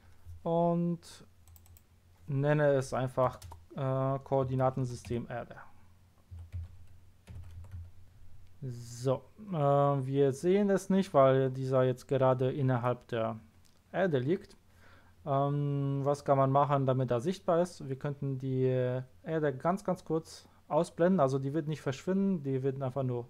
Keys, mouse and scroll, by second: 1.4 click, 1.6 click, 3.2 BackSpace, 4.6 shift+k, 4.8 o, 6.3-7.7 typing, 8.0 Return.